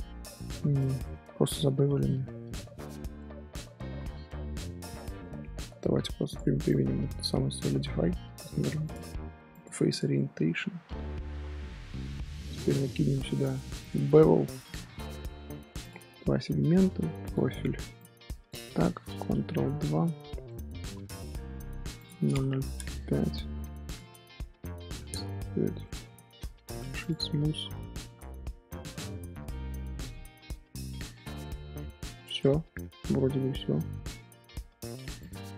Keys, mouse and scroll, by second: 0.3-0.7 scroll up 1, 0.7-6.2 middle drag, 6.2-10.1 drag, 10.1-10.5 middle drag, 10.5 Tab, 11.4 middle click, 12.2 Tab, 14.7-19.7 drag, 19.7 ctrl+2, 20.4-21.9 middle drag, 21.9-25.8 drag, 25.8-26.7 middle drag, 26.7-27.5 right drag, 27.5 z, 28.2-31.2 middle drag, 35.1 click.